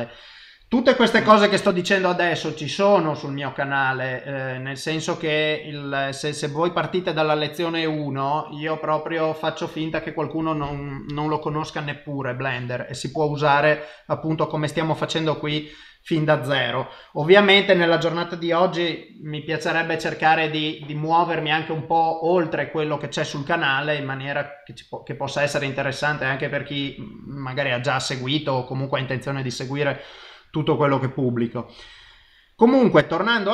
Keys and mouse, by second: 5.9 middle click, 13.2 middle click, 23.5 middle click, 26.6 typing, 28.1 middle click, 31.2 typing, 32.7 middle click.